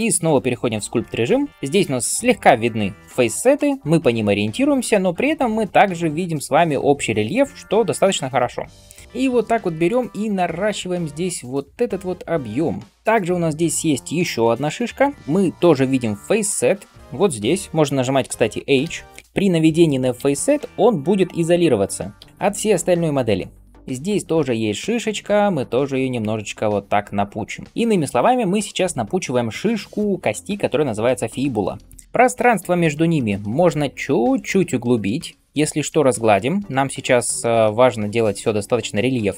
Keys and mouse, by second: 18.8 h, 19.0 h, 20.2 h, 21.3 h, 22.2 h, 23.7 h.